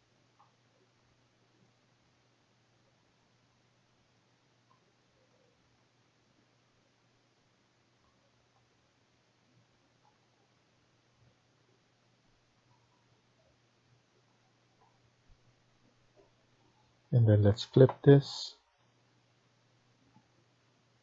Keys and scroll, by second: 18.5 Escape, 18.7 Escape.